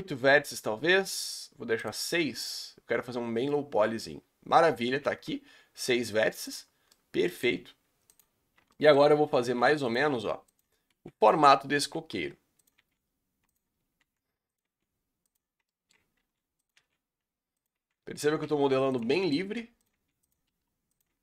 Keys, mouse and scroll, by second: 3.1-3.5 scroll down 3, 3.5-4.1 middle drag, 4.1 scroll up 3, 4.9 Tab, 5.3 s, 6.7 scroll up 4, 6.9-8.1 middle drag, 8.1 click, 8.7 middle click, 9.4-12.7 typing, 11.5 scroll down 2, 13.7 scroll down 3, 14.0 r, 14.6 g, 15.7 shift+middle click, 16.2-21.1 typing, 19.1 shift+middle click.